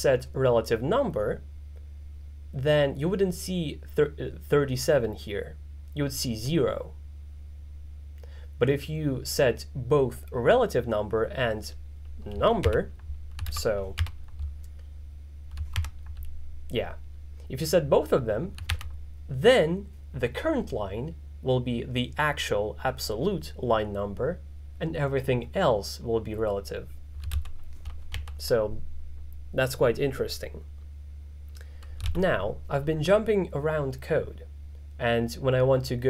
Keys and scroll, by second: 12.7 alt+6, 14.1 alt+6, 15.9 alt+7, 18.8 alt+4.